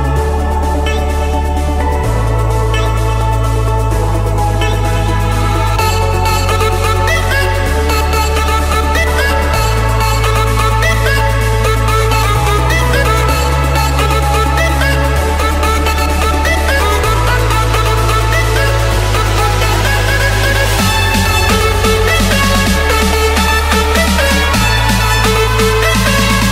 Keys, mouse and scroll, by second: 0.7 Escape, 2.0 click, 3.9 Delete, 4.8 scroll, 5.2 middle click, 7.7 c, 8.3 Return, 10.3 click, 16.4 d, 16.6 Return, 17.5 6, 17.7 Return, 19.5-20.6 middle drag, 25.6-26.5 drag.